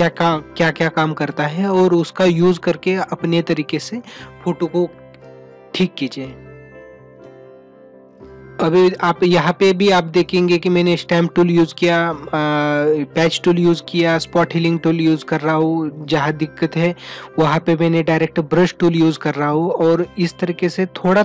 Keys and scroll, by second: 7.7 ].